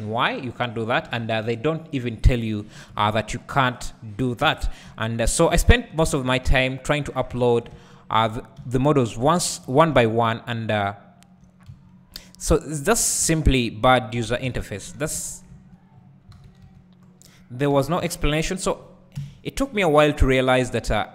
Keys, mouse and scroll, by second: 0.3-1.1 scroll up 1, 1.1 2, 2.7 KP_Decimal, 4.4 f, 4.9 `, 6.1 alt+click, 7.7 `, 9.4 alt+shift+click, 9.9 `, 14.1 x, 14.4 alt+a, 15.0 ctrl+z, 15.9-16.3 scroll down 2, 16.3 alt+a, 17.1 z, 17.5 click, 17.7 1, 19.2 KP_1, 20.2-20.7 scroll up 2, 20.7 Tab.